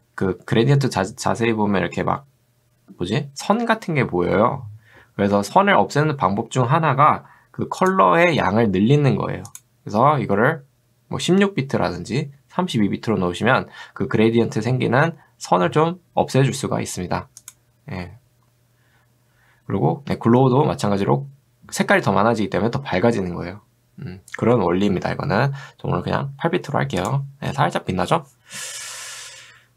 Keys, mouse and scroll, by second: 27.0 click, 29.3-29.7 scroll down 2.